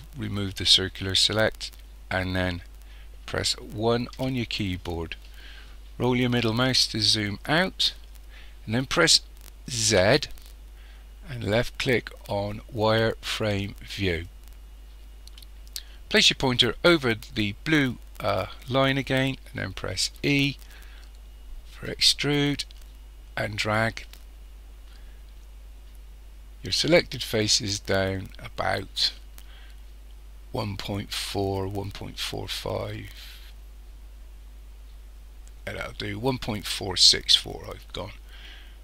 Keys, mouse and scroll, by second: 4.1 KP_1, 6.0-6.4 scroll down 1, 9.8 z, 20.2 e.